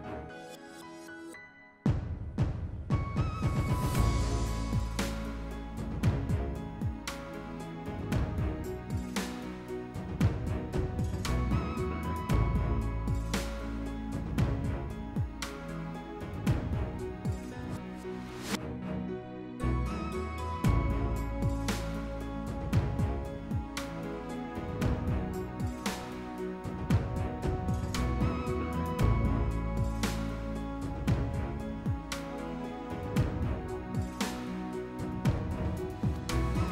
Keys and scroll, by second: 2.4 s, 4.0 s, 19.6 s, 33.6 s, 35.9 ctrl+z.